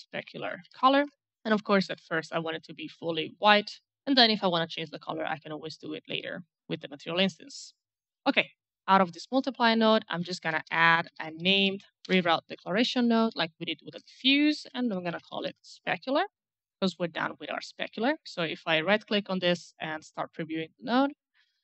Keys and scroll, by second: 0.0-1.0 typing, 9.8-11.9 typing, 13.4 Return, 14.0-15.7 typing.